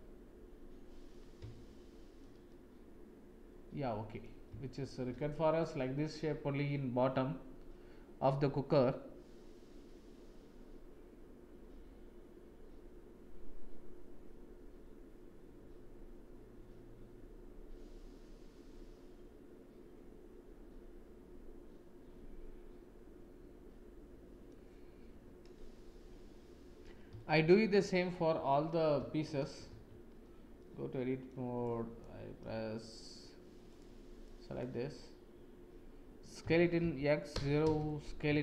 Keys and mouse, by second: 1.5 shift+middle click, 2.5-4.2 middle drag, 4.7 shift+middle click, 5.6-24.5 middle drag, 27.3 shift+middle click, 29.1 shift+click, 29.6 Tab, 30.5 click, 31.6 click, 33.7 click, 36.4 s, 38.2 s.